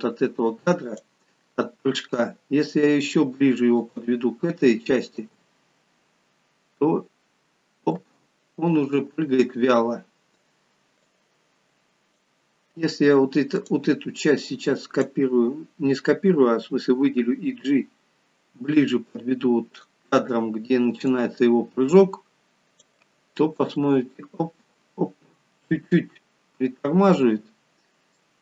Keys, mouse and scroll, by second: 1.0 click, 3.0 g, 5.3 space, 8.0 space, 13.6 click, 17.2 g, 19.8 click, 21.1 click, 23.6 space, 26.4 scroll up 6, 27.2-27.7 scroll down 4, 28.3 middle click.